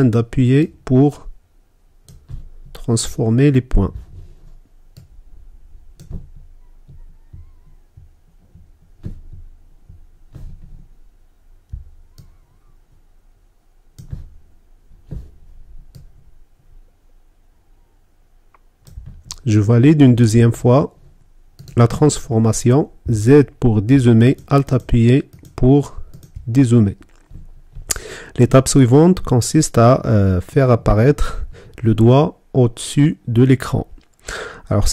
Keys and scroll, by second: 22.7 z.